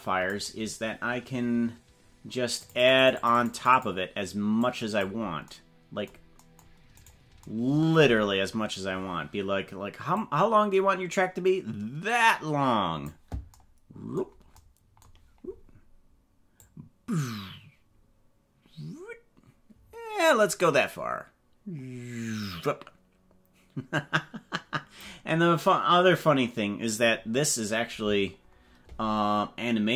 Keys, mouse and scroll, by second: 3.1 click, 4.7-7.1 drag, 8.2-8.6 scroll down 4, 10.1-13.1 drag, 16.7-25.1 drag.